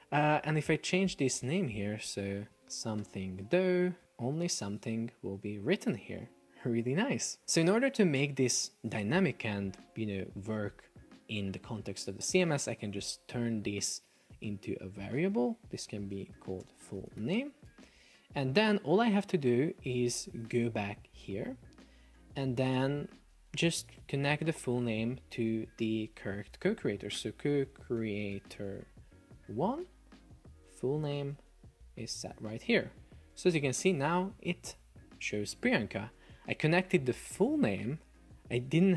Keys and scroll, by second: 2.6 shift+s, 4.0 Return, 4.4 super+p, 16.0 shift+f, 17.0 shift+n, 17.7 Return, 29.4 Delete.